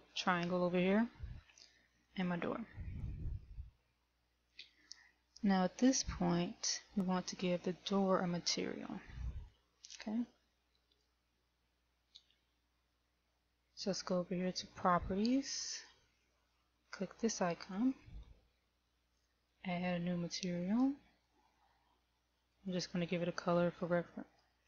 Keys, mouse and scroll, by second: 2.4 middle click, 9.3 KP_1, 9.9 click, 11.5 right click, 15.4 click, 18.4 click, 19.6 click, 23.0 click.